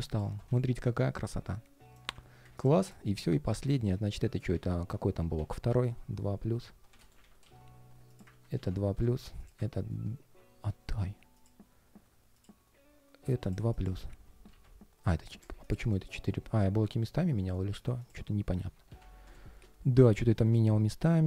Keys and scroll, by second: 2.2 super+s, 2.8 alt+i, 4.0 super+[, 4.3 super+r, 6.9 super+a, 7.3 super+c, 8.0 super+r, 8.3 super+v, 13.9 super+r, 14.2 super+v, 18.4 super+r, 18.6 super+v, 19.8 super+[.